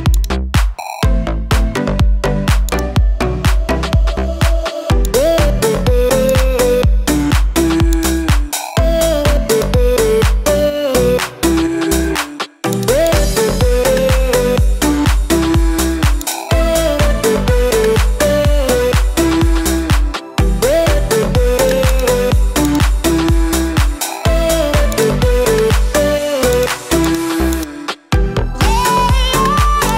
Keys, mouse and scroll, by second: 0.2-1.4 drag, 2.7 click, 5.1 click, 8.0-9.7 drag, 12.7 click, 13.1-14.1 drag, 16.3 click.